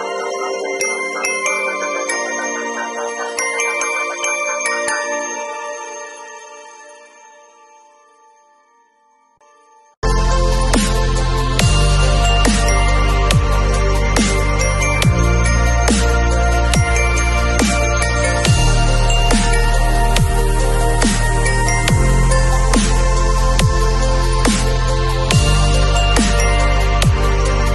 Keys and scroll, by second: 3.2 v, 16.5 alt+shift+super+Return, 17.0 Return, 17.4 super+t, 18.2 alt+super+t.